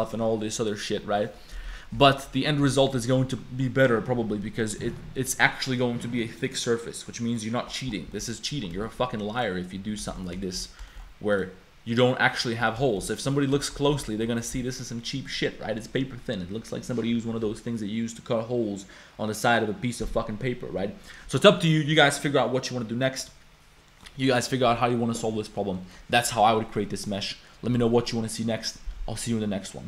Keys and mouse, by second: 0.7 middle click, 1.2 middle click, 1.6 middle click, 2.0 a, 2.2 middle click, 2.7 middle click, 2.7 click, 4.8 click, 7.4 click, 8.1 middle click, 8.8 shift+middle click, 9.3 middle click, 10.2 middle click, 10.4 shift+middle click, 10.9 shift+middle click, 12.7 middle click, 12.9 shift+middle click, 13.3 middle click, 13.6 shift+middle click, 13.9 a, 14.0 click, 23.9 click, 24.3 click, 25.7 click, 26.8 click.